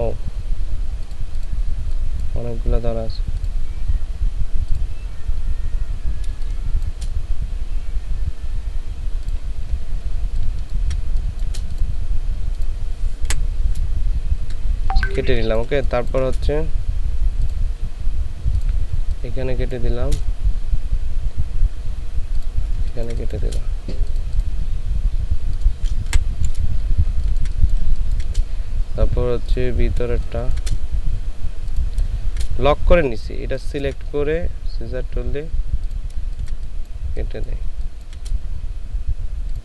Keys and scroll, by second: 10.4 ctrl+space, 13.3 Delete, 14.7 ctrl+space, 19.1 space, 22.8 ctrl+space, 26.1 Delete, 27.1 ctrl+space, 27.8 ctrl+space, 30.1 ctrl+space, 36.2 ctrl+space, 37.8 ctrl+space.